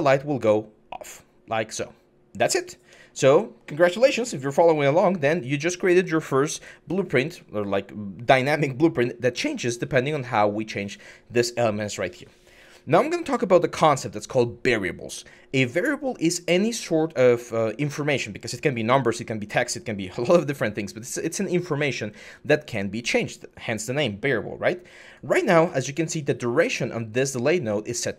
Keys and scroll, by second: 2.6 Escape.